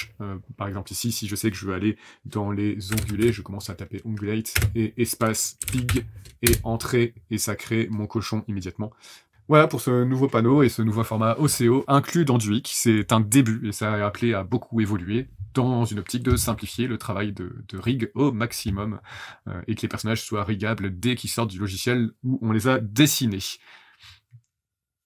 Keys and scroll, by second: 2.6-6.3 typing, 6.4 Return.